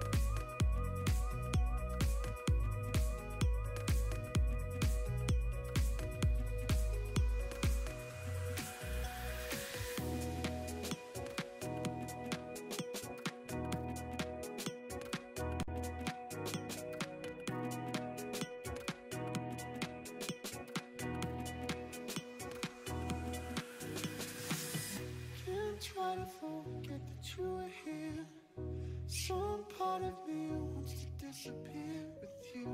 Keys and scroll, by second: 16.6 s, 21.5 s, 26.6 s, 31.6 s.